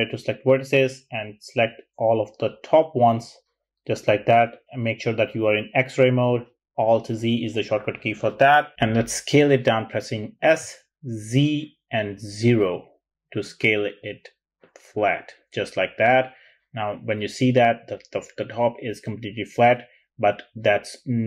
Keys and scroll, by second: 9.2 s, 11.0 z, 12.5 0, 13.7 typing.